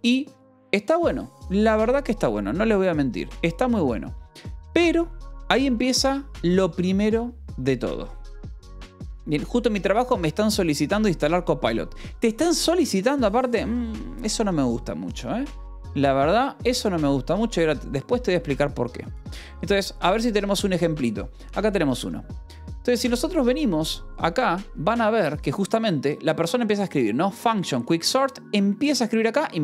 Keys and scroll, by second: 22.5 ctrl+=.